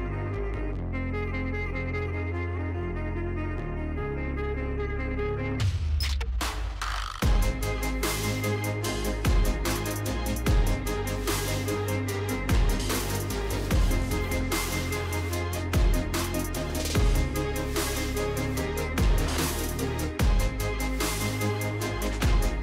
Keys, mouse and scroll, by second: 0.0-0.4 typing, 1.2 middle click, 1.2 middle click, 2.5 middle click, 2.5 middle click, 3.4 middle click, 3.5 middle click, 3.5 middle click, 5.0 click, 5.1 click, 7.2 click, 8.5-11.7 typing, 12.3 click, 12.8-14.1 typing, 13.7 click, 15.1 click, 16.8 click, 18.1 click, 18.7 space, 19.8-22.6 typing.